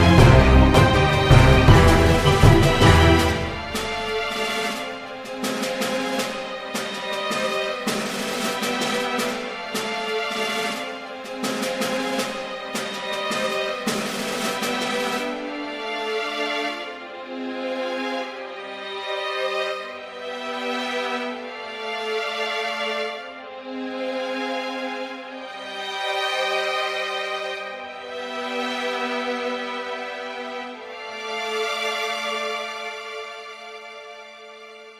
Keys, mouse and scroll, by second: 0.0 click, 0.6 middle click, 1.2 e, 2.1 s, 2.6 e, 4.3 ctrl+b, 6.4 click, 7.9 click, 8.8 ctrl+KP_Add, 9.3 click, 12.0 click, 13.2 click, 13.8 ctrl+i, 14.4 click, 15.0 a, 15.5-16.8 drag, 16.1 a, 16.6 a, 17.2 Tab, 17.5 KP_1, 17.9 r, 19.1-20.4 middle drag, 21.0 middle click, 21.4 click, 21.7 Tab, 22.5 middle click, 22.9 click, 23.4 click, 24.4 e, 25.1 click, 25.9 ctrl+r, 27.0 middle click, 27.2 KP_1, 29.6 middle click, 30.2 shift+a, 32.0 ctrl+r, 33.1 ctrl+r, 34.8 l.